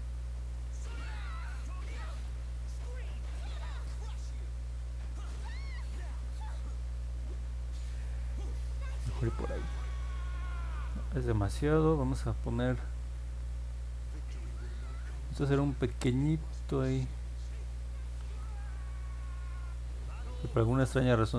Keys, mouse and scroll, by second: 1.2-3.4 drag, 4.0 ctrl+z, 5.4 click, 9.2-9.8 scroll down 2, 10.1 scroll up 1, 10.5 ctrl+z, 11.0 middle click, 15.7 click, 16.6 ctrl+z, 18.1 ctrl+z, 20.2 ctrl+z.